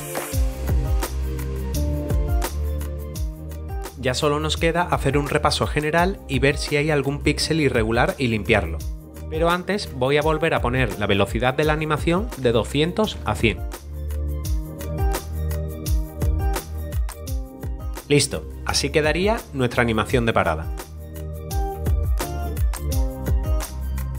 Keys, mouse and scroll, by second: 0.1 click, 1.1 Down, 1.2 Return, 1.3 click, 1.4 ctrl+click, 1.5 Down, 1.7 Return, 2.7 click, 3.1 0, 10.6 click, 11.6 click, 12.2-13.7 typing, 14.0 click, 14.3 click, 14.4 scroll up 1, 14.7 middle click, 15.2 middle click, 15.7 click, 16.1 click, 16.8 click, 16.9 double click, 17.1 click.